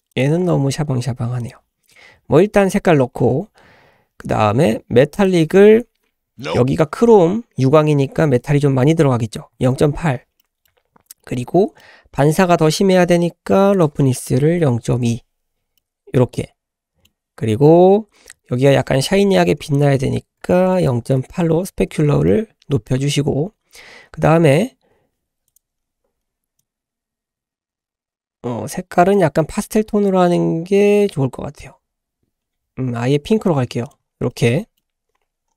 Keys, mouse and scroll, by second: 0.1 click, 1.4 typing, 1.8 click, 3.1-4.9 scroll down 3, 5.1-9.8 drag, 10.4 middle drag, 10.7-11.1 scroll up 2, 11.2 shift+middle drag, 11.5-11.8 scroll up 2, 11.8 middle click, 12.2-13.7 scroll up 1, 13.7-15.2 drag, 15.8-17.1 middle drag, 19.6-21.2 drag, 22.3 middle click, 25.5 click, 33.8 click, 34.0-34.3 scroll down 2, 34.3-34.9 middle drag, 34.9-35.4 scroll up 1, 35.4-35.5 scroll up 2.